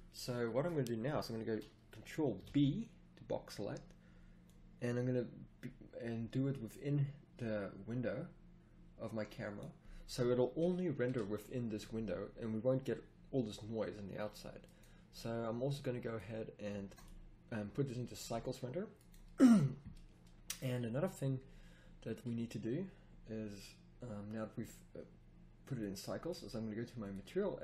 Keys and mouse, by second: 2.4 ctrl+b, 10.0 click, 13.5-14.6 middle drag, 18.2 a.